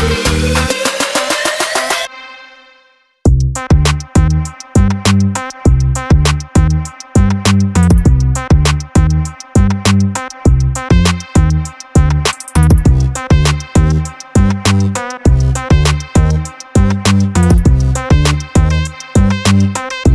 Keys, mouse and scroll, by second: 0.7 click, 1.7 click, 2.0 click, 2.3 click, 3.2 click, 3.6 click, 4.9 click, 5.2-12.5 drag, 13.0-15.4 drag, 15.9 click, 16.0 click, 16.2-19.7 drag, 20.0-20.1 drag.